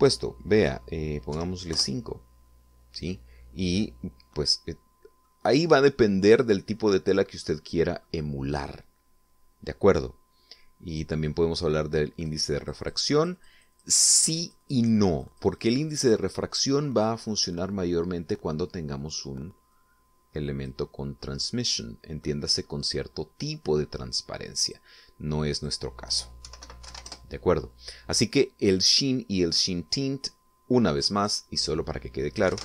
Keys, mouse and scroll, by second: 0.3 click, 2.4 5, 2.8 Return, 5.7 middle click, 6.7 middle click, 8.5 middle click, 13.2 click, 13.7-17.5 drag, 20.8 click, 25.1 click, 26.6 click, 27.3-28.4 typing, 32.2 click.